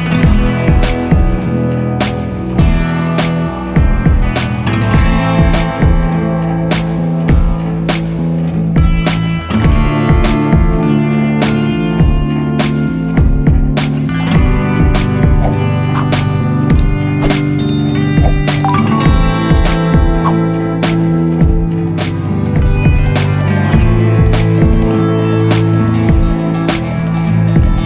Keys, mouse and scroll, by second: 8.0 ctrl+click, 11.7 ctrl+j, 18.0 ctrl+d.